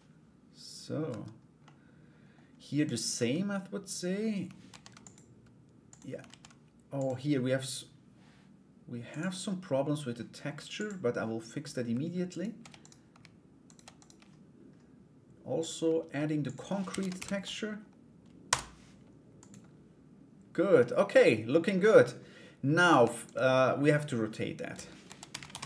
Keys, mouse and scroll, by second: 0.7 Tab, 1.2 middle click, 2.4 right click, 4.2 ctrl+r, 10.3 click, 11.9 alt+right click, 12.4 shift+right click, 13.2 shift+right click, 13.5 shift+right click, 15.1 click, 16.0-18.4 drag, 18.9 click, 20.4 middle click, 22.4 right click, 22.8 alt+right click, 24.6 r, 25.3 Tab.